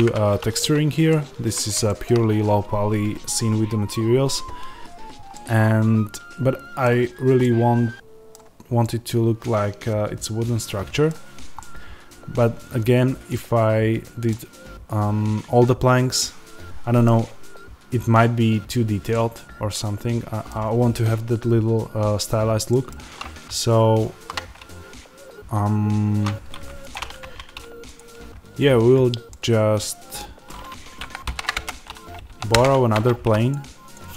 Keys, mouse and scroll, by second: 6.9-7.3 scroll down 1, 7.3-8.7 right drag, 8.7-23.5 middle drag, 17.0-17.8 scroll down 1, 17.8-19.0 scroll up 1, 23.5-26.8 shift+right drag, 26.8 click, 27.1 Tab, 27.9 click, 29.2-33.4 middle drag, 31.1 shift+d, 31.5 Return, 32.4 p, 32.5 Return, 32.8 Tab, 33.4 click.